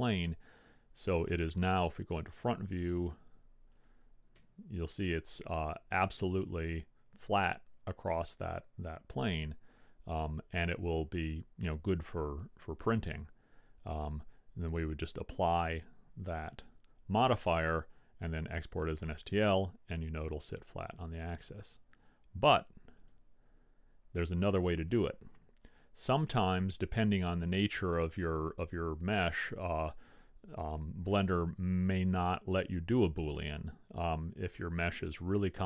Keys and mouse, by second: 3.8 click, 4.6 KP_1, 5.2 click, 6.7-7.7 middle drag, 7.7 click, 9.8 middle click, 10.3-12.8 drag, 12.8 middle click, 23.2-24.8 drag, 29.4-31.3 middle drag, 32.8-34.5 middle drag.